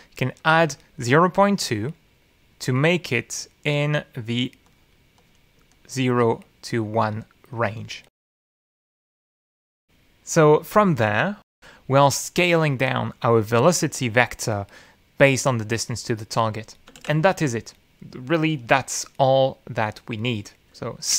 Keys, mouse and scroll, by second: 0.2 click, 2.3 click, 4.2 click, 7.0 click, 8.0 click, 10.3 shift+e, 10.7 shift+d, 17.3 click, 17.7 ctrl+x.